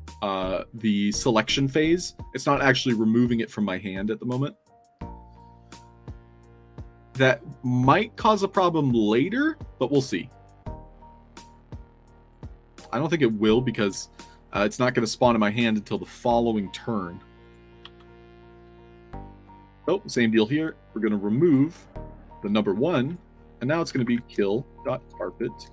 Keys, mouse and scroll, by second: 5.2 click, 6.0 middle click, 12.2 click, 13.7 click, 17.3 click, 17.8-19.2 typing, 18.5 scroll up 2, 19.3 click, 20.1 middle click, 20.3 middle click, 21.3 click, 23.0 click, 23.9-25.7 typing.